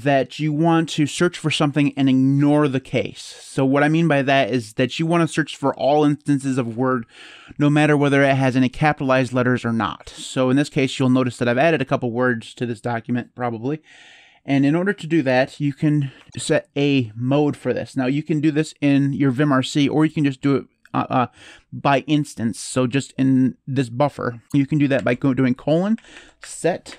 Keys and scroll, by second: 24.7-26.9 typing.